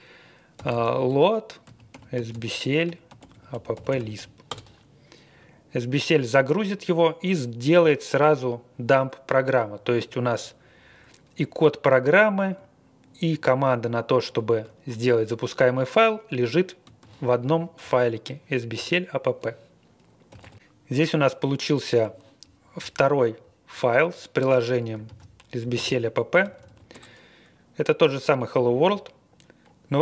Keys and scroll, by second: 0.3-4.6 typing, 20.3 typing, 20.6 Return, 25.1 super+c, 25.7 super+v, 26.3-27.1 typing.